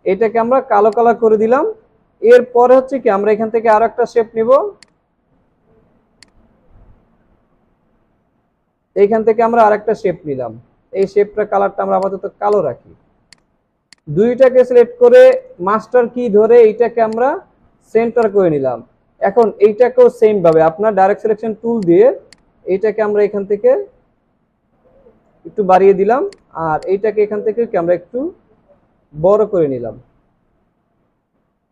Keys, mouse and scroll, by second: 0.5 alt+scroll up 1, 18.8 alt+scroll up 1, 19.4 space, 29.6-31.5 scroll down 1.